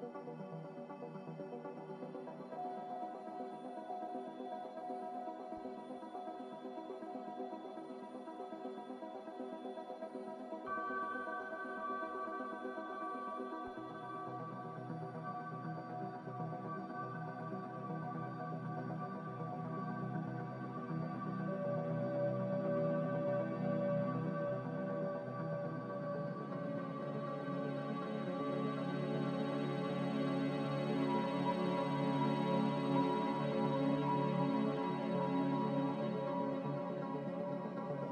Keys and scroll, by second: 3.2-4.6 typing, 9.4 z, 12.1 typing, 16.2 x, 20.6 z, 23.9 f, 27.7 a.